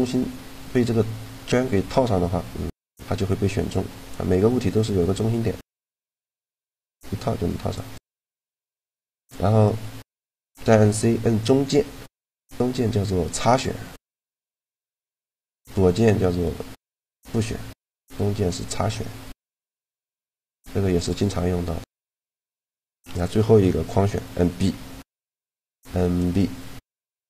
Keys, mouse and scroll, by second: 7.8 right click, 8.0-9.8 middle drag, 10.5 c, 21.6 middle click, 22.9-24.6 drag, 25.1 b, 27.0 b.